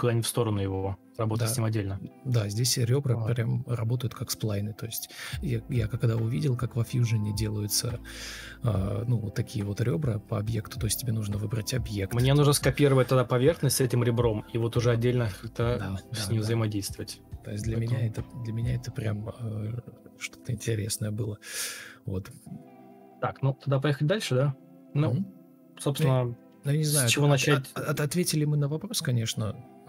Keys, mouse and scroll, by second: 6.4 ctrl+space, 12.1 Delete, 12.4 ctrl+space, 13.1 ctrl+m, 14.3 ctrl+space, 15.9 ctrl+x, 16.0 ctrl+z, 19.3 ctrl+z, 19.9 Delete, 20.3 ctrl+v, 20.9 ctrl+d, 21.3 Delete, 21.8 Delete, 23.6 Escape, 23.7 Escape, 27.0 ctrl+v, 27.0 ctrl+z, 27.4 ctrl+space.